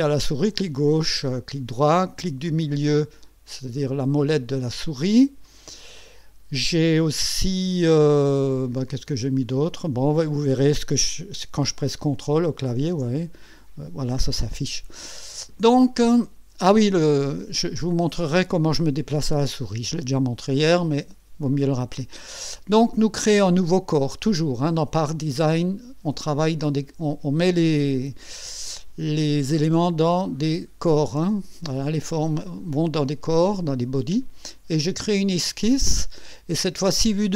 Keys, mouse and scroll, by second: 1.2 right click, 2.4 click, 3.0 middle click, 3.9 click, 5.4 click, 23.4 click, 34.9 click.